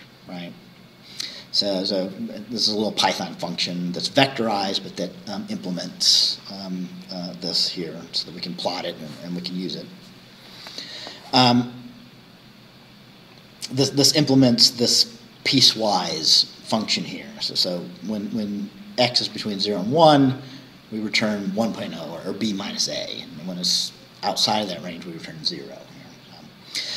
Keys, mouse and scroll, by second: 0.8 scroll up 2.